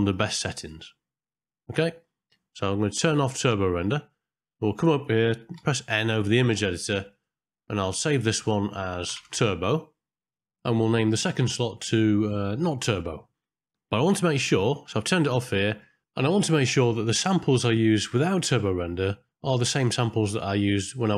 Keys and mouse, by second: 0.0-0.7 drag, 2.0 middle click, 3.3 click, 3.8 click, 5.6 n, 7.9 click, 8.2-10.4 drag, 10.5-13.1 drag, 12.2 BackSpace, 12.7 BackSpace, 15.7 click, 16.5 middle click, 20.7-21.1 drag.